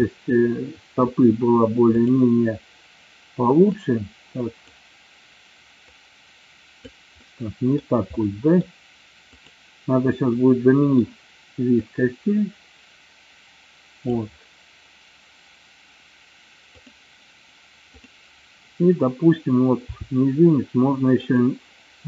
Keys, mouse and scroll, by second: 0.1-1.1 middle drag, 3.7-4.9 drag, 6.0 click, 7.2-8.0 middle drag, 8.2-8.6 middle drag, 9.3-10.0 drag, 10.3-11.1 middle drag, 12.0-14.2 drag, 18.0-18.6 drag, 20.0 r, 21.5 click.